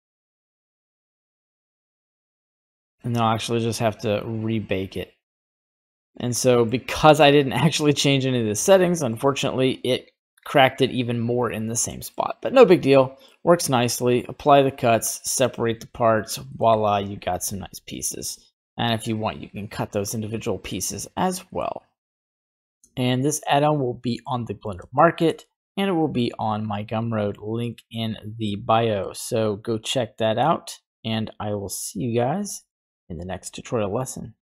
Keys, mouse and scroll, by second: 3.5-4.1 scroll down 1, 4.1-5.6 drag, 4.1-5.6 scroll down 1, 6.3 middle click, 8.7 shift+middle click, 9.9-11.2 drag, 11.8 middle click, 12.5 middle click, 14.0 click, 14.8 click, 15.3 scroll down 1, 15.4 middle click, 15.7 right click, 15.9 Tab, 16.5 middle click, 16.7 right click, 17.4 g, 18.3 middle click, 18.7 right click, 19.9-20.4 scroll down 2, 20.3 middle click, 21.5 middle click, 22.4 middle click, 22.4 shift+right click, 22.4 a, 23.7 scroll down 1, 24.2 middle click, 24.9 shift+scroll down 1, 25.0 shift+middle click, 25.4-27.3 middle drag, 27.3 scroll up 1, 28.1 right click, 29.0 g, 30.5 right click, 31.0 g.